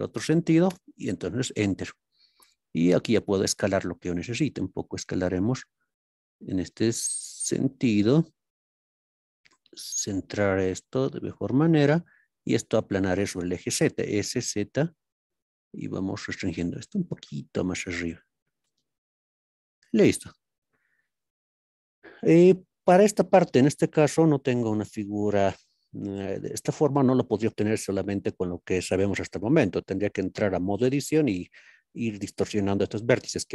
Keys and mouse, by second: 0.7 KP_Enter, 8.1 click, 11.8-16.1 drag, 16.8 g, 17.2 z, 19.8 click, 22.4 shift+middle click, 22.7 shift+middle click.